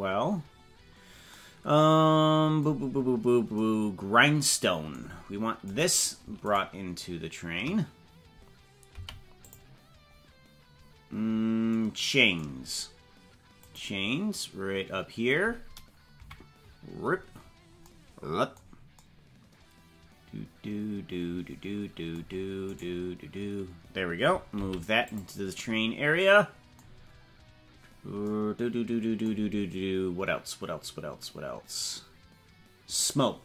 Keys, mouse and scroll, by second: 3.1 scroll down 4, 5.8 right click, 6.6 shift+right click, 9.1 m, 10.9-11.3 scroll down 5, 12.9 scroll up 2, 13.7 right click, 16.2 KP_Decimal, 16.9-17.7 scroll down 15, 22.9 right click, 24.7 m, 27.0-27.7 scroll down 10, 28.1 scroll down 4.